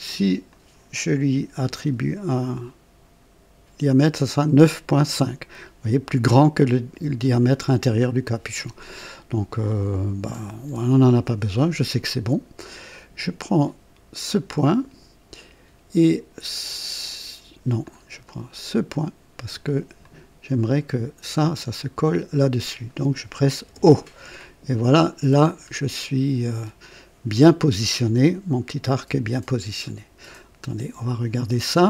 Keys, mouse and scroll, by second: 0.5 click, 1.6 r, 10.6 Escape, 14.2 click, 17.8 click, 20.0 click, 21.9 click, 23.6 o, 25.1-25.6 scroll down 2.